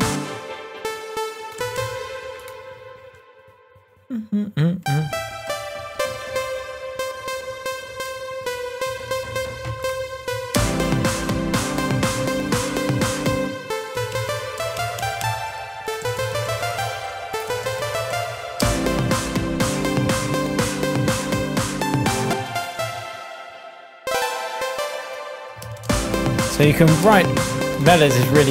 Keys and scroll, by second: 0.1 space, 1.5 Up, 10.2 Down, 10.5 space, 13.4 space, 13.9 Up, 18.6 space, 22.3 space, 22.7 Down, 25.6 super+d, 25.8 super+n, 26.0-27.5 typing.